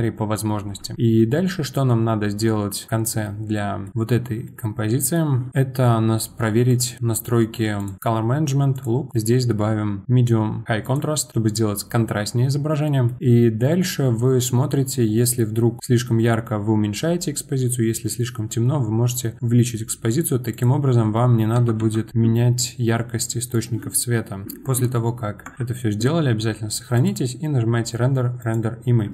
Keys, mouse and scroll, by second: 3.2-3.6 scroll down 1, 3.6-3.9 middle drag, 3.9 click, 4.1-4.5 scroll up 2, 4.5-6.7 middle drag, 6.7 click, 7.8-11.1 drag, 12.8 middle click, 13.2-14.6 scroll down 2, 14.6-15.8 scroll down 1, 15.8-18.4 drag, 20.5-22.3 drag, 22.3 middle click, 22.7-23.2 scroll down 1, 23.2-25.5 middle drag, 25.5 ctrl+s, 26.9-29.1 drag.